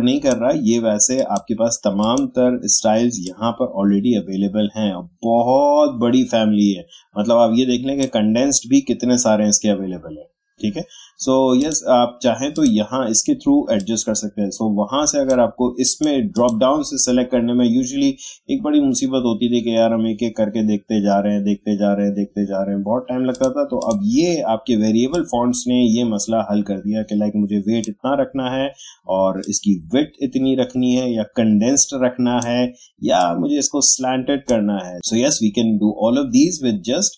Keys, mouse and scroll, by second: 11.6-15.8 drag, 23.3-34.9 drag.